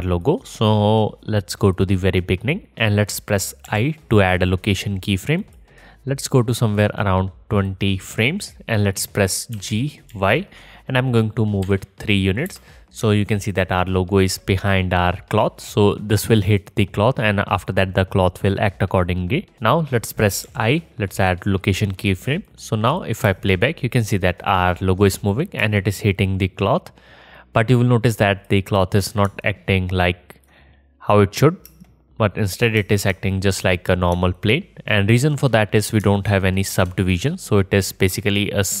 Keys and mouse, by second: 3.7 i, 9.6 g, 22.4-25.2 drag, 23.3 space, 25.6 space, 27.9-29.1 drag, 29.1-32.2 alt+middle drag, 31.7 space, 32.8 space, 33.7-37.2 middle drag, 37.3-38.8 middle drag.